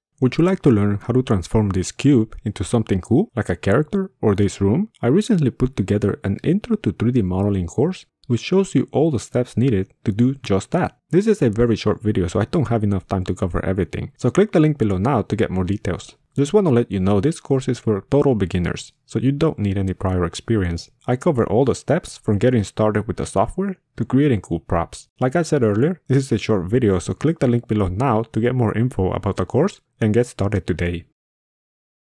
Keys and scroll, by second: 6.8 r, 8.4 1, 9.1 3, 9.9 g, 10.0 w, 11.5 g.